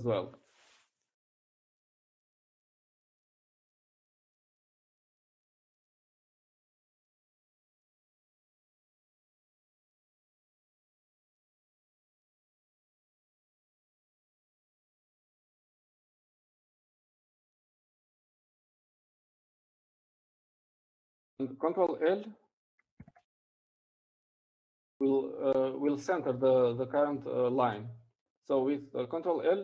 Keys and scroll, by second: 23.5 ctrl+p, 26.5 ctrl+l.